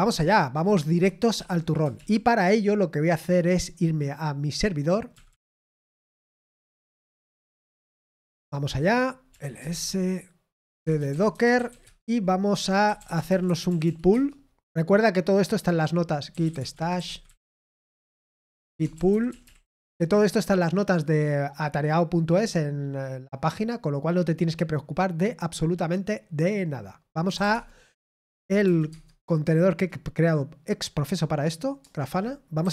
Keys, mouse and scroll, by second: 1.9 super+l, 5.6-6.5 typing, 11.5 typing, 14.1 typing, 17.3-19.9 typing.